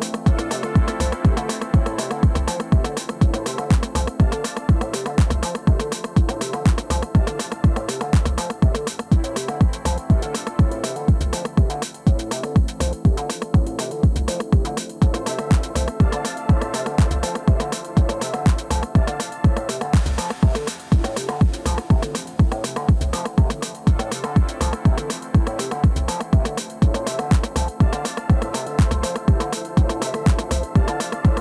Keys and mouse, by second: 2.1 KP_1, 3.6 KP_3, 4.7-6.5 drag, 6.7 ctrl+i, 7.8 KP_1, 8.9-15.9 drag, 10.7 g, 14.9 middle click, 15.9 middle click, 16.0-18.0 drag, 19.2-20.3 middle drag, 20.3 alt+m, 21.4-23.7 drag, 23.7-26.7 middle drag, 26.7-28.7 drag, 29.5-31.4 drag.